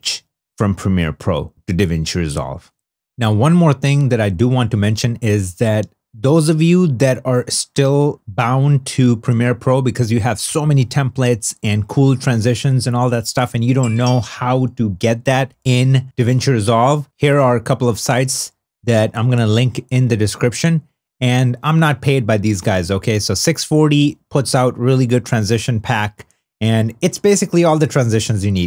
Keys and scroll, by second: 16.0 super+Tab.